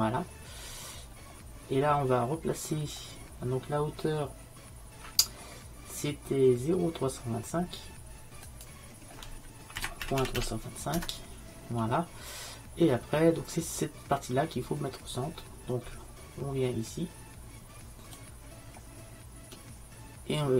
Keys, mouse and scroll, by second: 0.7 middle click, 2.8-6.4 middle drag, 8.5-10.4 drag, 18.2-20.2 drag.